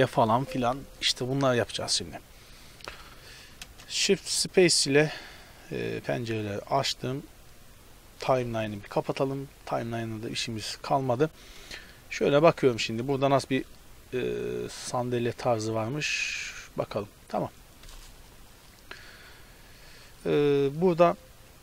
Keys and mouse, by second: 3.2-5.2 middle drag, 3.6 shift+space, 5.8 click, 7.7 click, 8.0-12.1 drag, 12.1-12.8 middle drag, 12.8-17.9 drag, 17.9-21.6 middle drag.